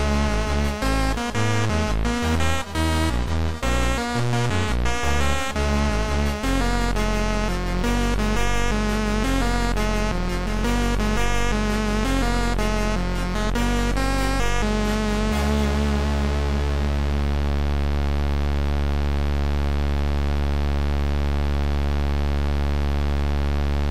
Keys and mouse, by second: 2.9 click, 3.6 click, 4.1 click, 4.3 right click, 6.8 click, 6.8 right click, 8.3 click, 9.0 right click, 11.8 click, 11.8 right click, 12.6 click, 12.9 click, 14.8 shift+click, 18.1 shift+click, 21.4 click.